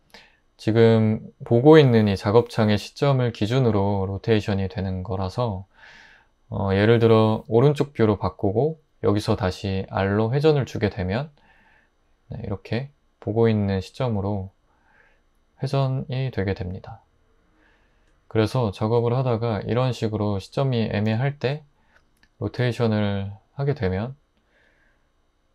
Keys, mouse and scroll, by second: 9.9 r, 22.6 r.